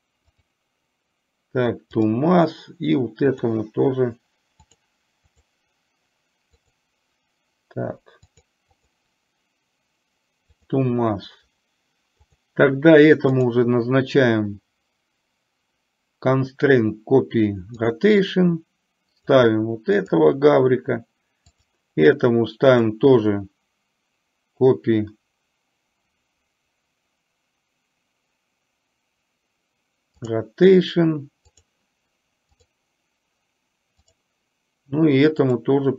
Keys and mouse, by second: 3.3 click, 4.8-8.4 drag, 8.8-10.9 drag, 12.3 click, 13.4-18.1 drag, 19.2 click, 21.6 click, 22.7-30.4 drag, 31.6 click, 34.1 click, 35.6-35.9 drag.